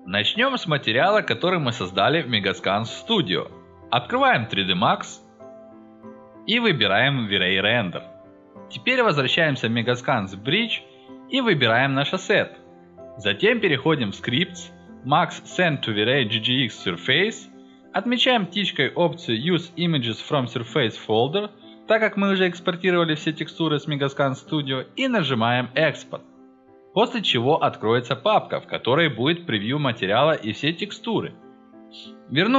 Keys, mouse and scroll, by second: 5.8-7.6 drag, 7.8-9.6 drag, 10.6 click, 11.3 click, 11.7-17.0 drag, 17.5 drag, 19.6 click, 20.5 click, 25.0-25.5 drag, 27.0 click, 28.1 click, 30.4 click, 31.7 click.